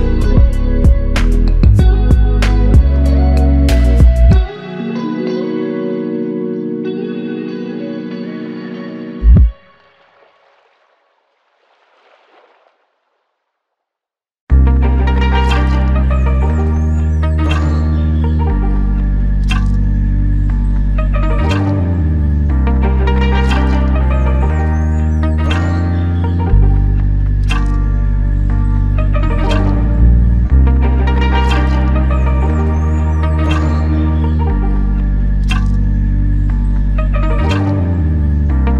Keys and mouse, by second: 7.4 ctrl+alt+click, 8.2 alt+click, 9.9 ctrl+alt+click, 13.6 alt+click, 23.8 alt+click, 27.9 alt+click, 29.1 ctrl+alt+click, 30.2 alt+click, 32.2 f, 34.0 alt+click, 35.8 ctrl+alt+click.